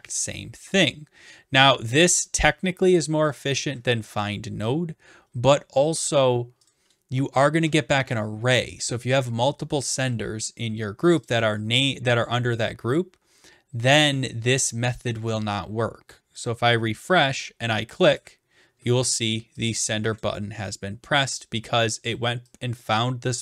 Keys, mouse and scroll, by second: 2.4 shift+click, 6.7 click, 9.8 click, 11.2 click, 11.4 click, 15.1 click, 16.5 click, 18.2 click, 20.2 click, 22.1 click.